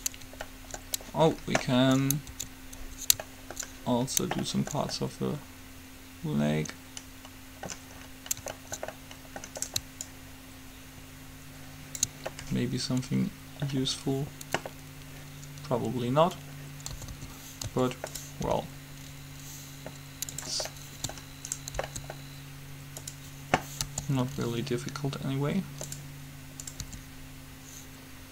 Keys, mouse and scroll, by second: 2.6 Tab, 9.7-11.8 drag, 17.1 a, 17.3 a, 17.8 a, 18.3 click, 18.8 r, 20.2-21.4 drag, 20.8 s, 22.0 s, 24.0 g, 26.8-28.3 drag, 27.0 r.